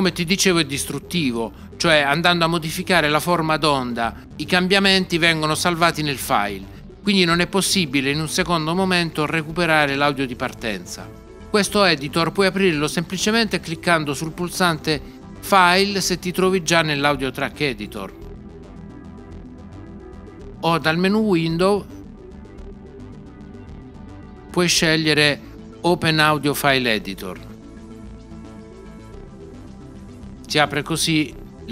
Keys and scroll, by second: 23.2 6.